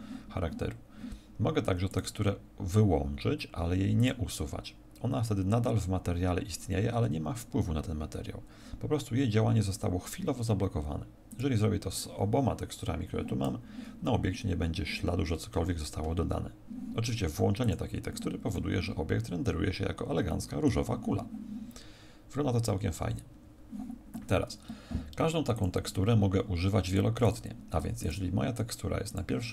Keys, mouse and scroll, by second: 1.9 click, 3.9 click, 11.3 click.